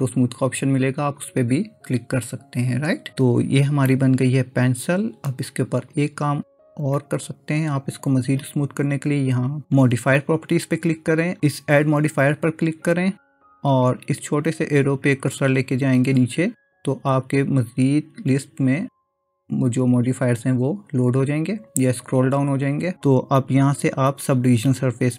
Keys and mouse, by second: 4.0-5.3 middle drag, 5.9 drag, 10.5 click, 11.9-25.1 drag.